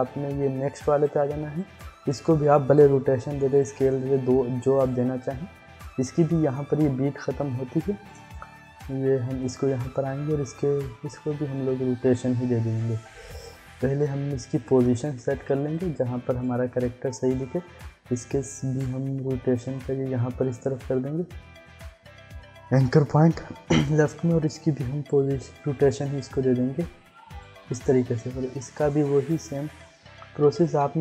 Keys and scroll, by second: 3.3 r, 13.3 ctrl+z, 30.8 ctrl+z.